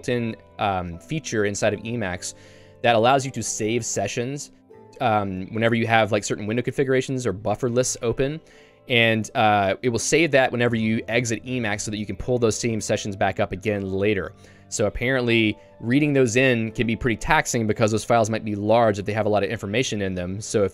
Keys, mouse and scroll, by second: 15.3 shift+v.